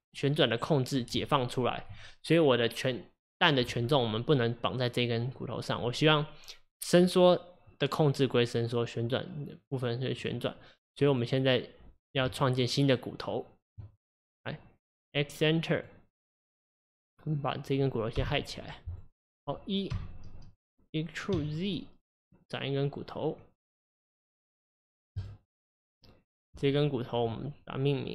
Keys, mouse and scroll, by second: 10.2 click, 11.1 click, 12.4 Tab, 14.2 click, 15.1-15.8 scroll up 1, 15.8 click, 16.3 click, 17.0 click, 18.2 h, 18.9 click, 20.0 e, 27.3 Tab.